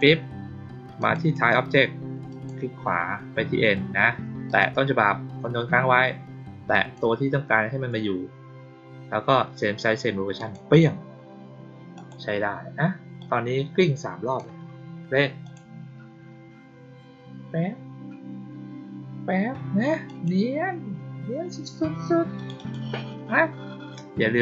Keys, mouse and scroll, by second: 0.9 click, 1.3 right click, 2.2 click, 4.4 click, 6.6 ctrl+click, 10.3 click, 11.9 click, 13.1-14.3 drag, 15.4 click, 20.0 click, 22.3 click, 22.5 click.